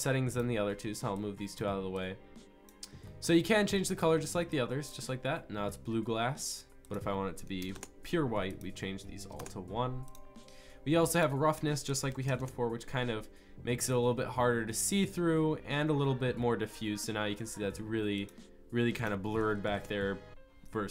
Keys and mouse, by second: 4.6 click, 4.8-7.0 drag.